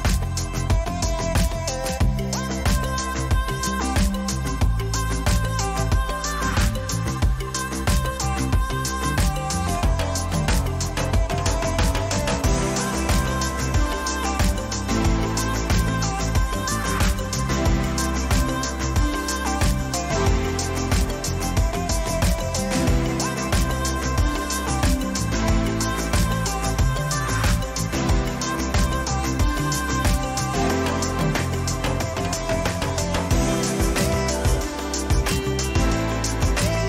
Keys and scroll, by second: 0.7 ctrl+-.